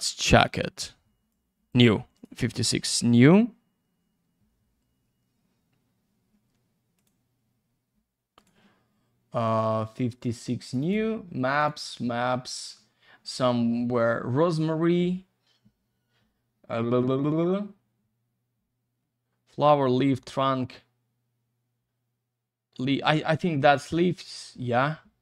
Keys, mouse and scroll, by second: 0.2 click, 1.3 click, 2.1 click, 6.9 click, 8.7 click, 10.6 click, 10.8 click, 11.5 click, 23.6 click.